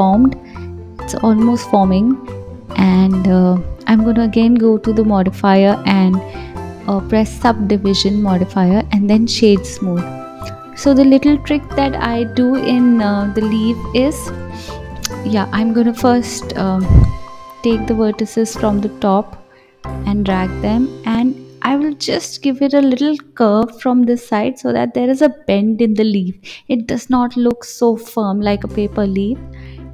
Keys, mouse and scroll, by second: 0.0-1.3 middle drag, 1.9-7.8 drag, 7.8 right click, 10.0 KP_1, 10.7-11.9 scroll up 3, 11.9-13.2 drag, 13.9 g, 16.5-16.8 scroll down 2, 16.8 middle click, 18.2 click, 18.8 middle click, 19.7 KP_3, 21.2 g, 23.5 click, 24.0-25.7 middle drag, 27.4-29.2 drag.